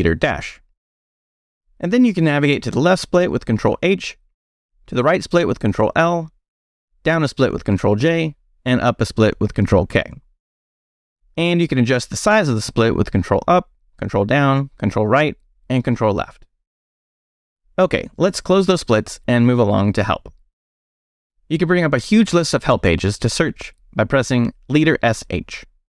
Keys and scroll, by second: 0.0 space, 0.3 -, 4.5 ctrl+h, 6.0 ctrl+l, 7.1 ctrl+j, 9.3 ctrl+k, 11.8 ctrl+Up, 12.4 ctrl+Up, 13.4 ctrl+Down, 14.5 ctrl+Right, 15.4 ctrl+Left, 18.5 Escape, 19.1 shift+;, 19.7 shift+q, 19.8 Return, 20.6 shift+Return, 20.7 shift+;, 21.1 shift+q, 21.2 Return, 24.3 space, 24.5 s, 25.6-25.9 typing.